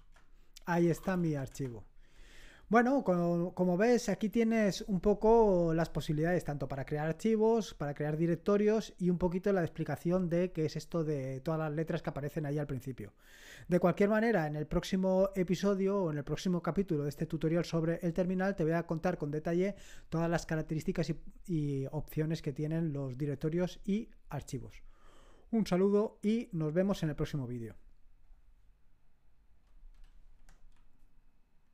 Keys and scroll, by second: 0.0-2.2 typing.